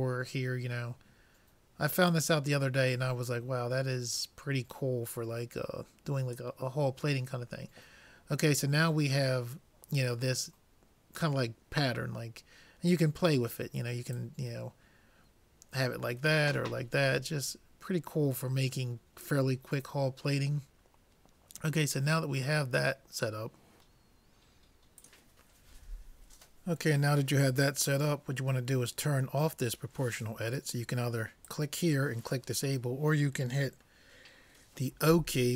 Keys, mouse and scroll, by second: 2.1-3.9 drag, 14.4-16.0 drag, 31.5-33.3 drag, 35.1 o.